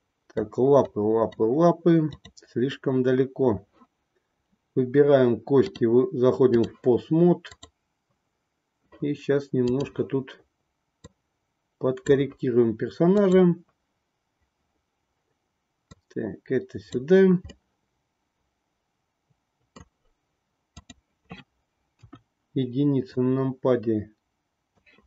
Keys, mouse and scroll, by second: 0.9 middle click, 2.0 click, 5.5-6.7 drag, 7.5-8.9 drag, 9.7 click, 11.1-12.3 drag, 13.1-14.5 drag, 15.8-17.1 drag, 17.5-19.9 middle drag, 21.9 KP_1, 23.0-24.9 drag.